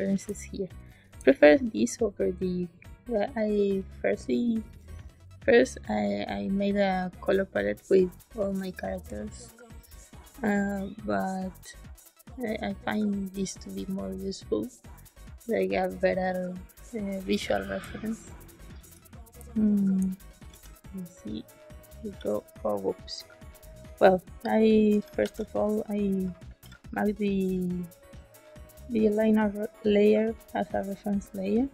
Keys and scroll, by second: 0.2 space, 17.7 space, 19.3 space, 20.4 g, 22.0 z, 25.1 shift+s, 26.4 shift+s.